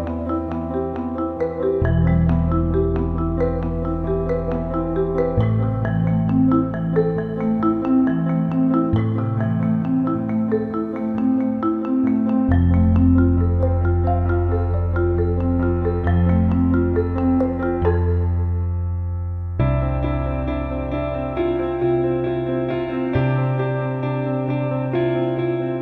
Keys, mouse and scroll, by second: 0.0 space, 1.5 click, 2.5 click, 3.2 right click, 3.4-7.2 drag, 7.2 click, 7.5 right click, 7.8-9.7 drag, 8.3 typing, 9.7-10.8 drag, 10.8 Left, 12.1-12.5 typing, 12.5 click, 13.8-15.3 drag, 15.3 ctrl+d, 15.9 click, 16.5-17.0 scroll up 1, 17.0-18.2 drag, 18.4 right click, 18.5 click, 21.2 scroll up 1, 22.3 right click, 22.5-25.8 drag.